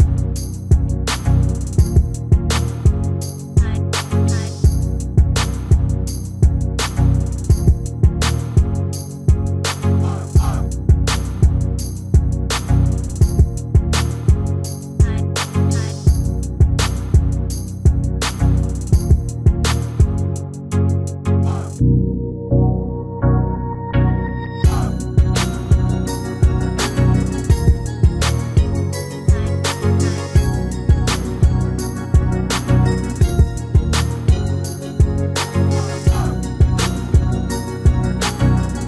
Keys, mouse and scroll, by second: 5.0-7.1 middle drag, 7.6-9.4 drag, 10.1-12.7 middle drag, 16.2 click, 17.2 click, 17.8-23.7 middle drag, 24.5-26.5 middle drag, 26.1 shift+d, 32.6-34.6 middle drag, 34.7 r.